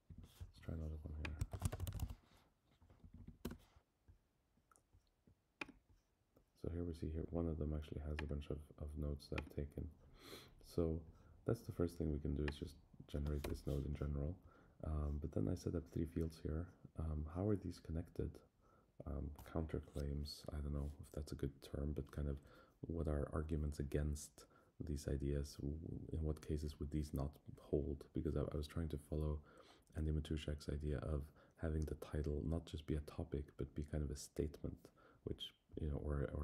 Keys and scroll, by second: 0.0 Down, 3.0 Down, 3.4 Return.